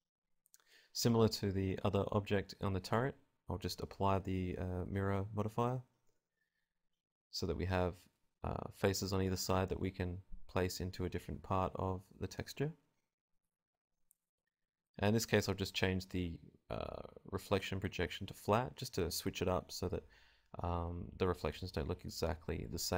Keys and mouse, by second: 3.3 Tab, 4.1-5.1 drag, 5.1 b, 5.8 b, 6.2 b, 6.8 b, 7.3-8.8 drag, 8.3 KP_Decimal, 8.8 alt+z, 8.8-9.9 middle drag, 9.9 KP_0, 10.1 alt+z, 10.3 alt+z, 10.6 g, 10.8 click, 11.0 r, 11.7 r, 12.1 click, 13.0 Tab, 18.8-21.3 middle drag, 22.3 middle click.